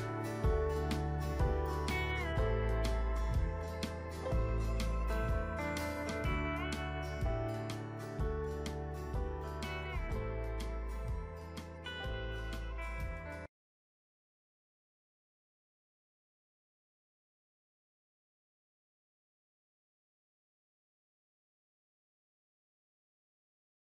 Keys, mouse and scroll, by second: 1.3-7.0 drag.